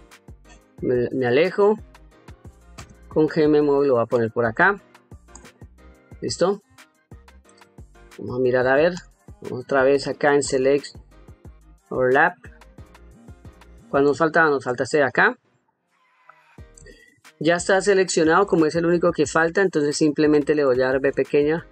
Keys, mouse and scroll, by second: 0.1 ctrl+middle click, 2.6 g, 4.0 click, 5.2 click, 6.6 ctrl+middle click, 7.8 ctrl+middle click, 8.8 click, 10.3-11.5 drag, 12.8 ctrl+middle click, 14.1 shift+middle click, 14.7 ctrl+middle click, 15.3 ctrl+middle click, 15.9 ctrl+middle click, 16.7 shift+middle click, 17.5 ctrl+middle click, 18.4-19.5 shift+middle drag, 20.8 v.